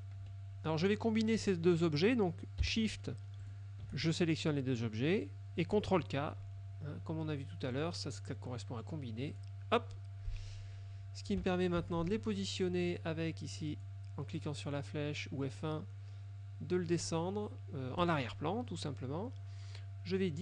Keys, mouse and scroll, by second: 0.3 F2, 3.6 shift+click, 7.9 click, 9.4 click, 11.9 F1, 13.8 click, 18.2 click.